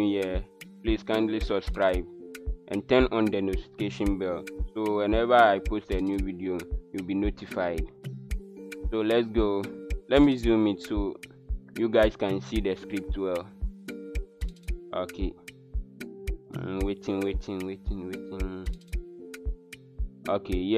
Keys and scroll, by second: 10.5 super+=.